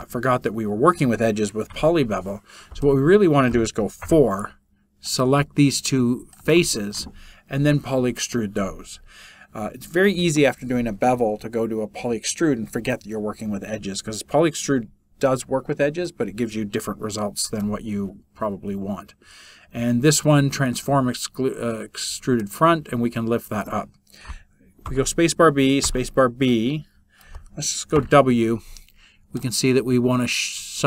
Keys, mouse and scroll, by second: 1.8 Delete.